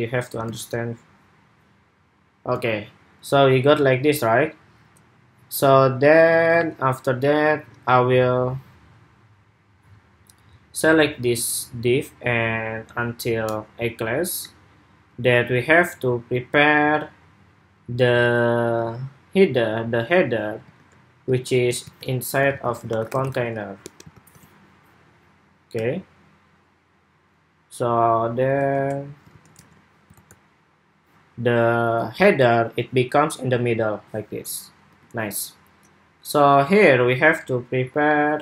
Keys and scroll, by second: 0.4 super+r, 20.5 super+Tab, 21.1 super+Tab, 21.6 super+x, 23.9 super+v, 29.0 super+s, 29.4 super+Tab, 30.4 super+r, 34.7 super+Tab.